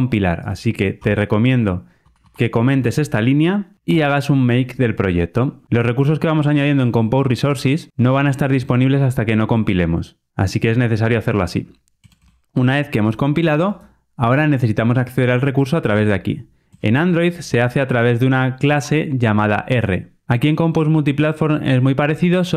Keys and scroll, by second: 3.8 super+F9.